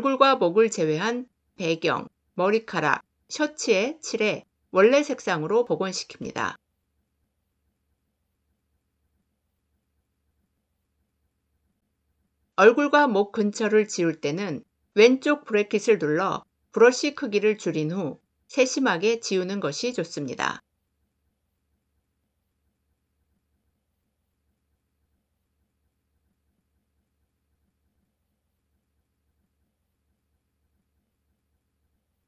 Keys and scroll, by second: 14.9 [.